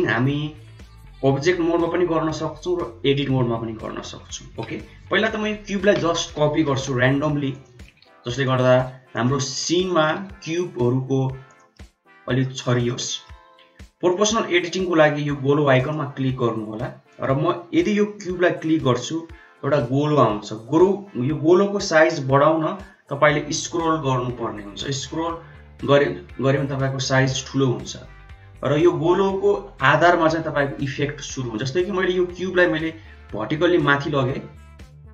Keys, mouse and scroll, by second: 0.0 n, 5.5 KP_7, 6.6 shift+d, 7.8 shift+d, 8.6 shift+d, 9.3 shift+d, 10.1 shift+d, 11.6 middle click, 12.7-13.1 shift+middle drag, 14.0 click, 15.7 click, 17.0 click, 17.9 g.